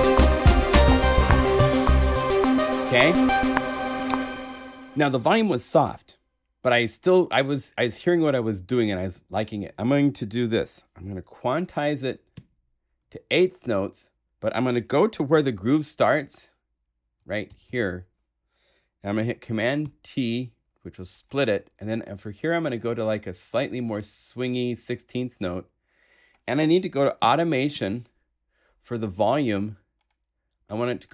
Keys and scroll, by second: 12.3 q, 15.3 ,, 17.4 ,, 19.8 super+t, 27.2 a.